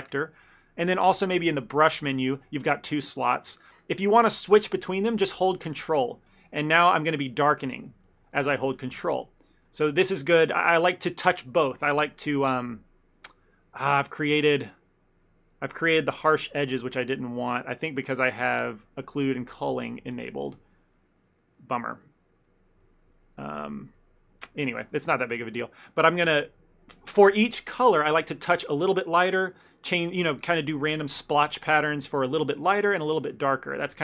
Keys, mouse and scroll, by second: 1.6 click, 6.3 ctrl+click, 6.7 ctrl+click, 7.9 ctrl+z, 7.9 ctrl+click, 8.0 ctrl+z, 8.4 ctrl+z, 8.7 f, 9.1 ctrl+middle click, 9.4 ctrl+middle click, 9.8 ctrl+middle click, 10.1 ctrl+middle click, 10.7 ctrl+middle click, 13.1 middle click, 13.3 ctrl+middle click, 13.8 shift+middle click, 14.0 ctrl+middle click, 14.3 middle click, 15.3 middle click, 15.3 shift+middle click, 15.6 middle click, 15.8 shift+middle click, 16.3 shift+middle click, 16.5 middle click, 18.2 middle click, 18.2 click, 20.5 ctrl+middle click, 20.8 middle click, 21.0 middle click, 21.1 ctrl+middle click, 21.3 ctrl+middle click, 21.7 middle click, 21.9 middle click, 22.1 ctrl+middle click, 22.5 middle click, 22.9 ctrl+middle click, 23.2 middle click, 24.0 ctrl+middle click, 24.8 f, 25.1 ctrl+middle click, 25.3 middle click, 25.6 ctrl+middle click, 26.0 ctrl+click, 31.7 f, 32.0 click, 32.9 ctrl+click, 33.1 click, 33.5 shift+middle click, 33.8 middle click.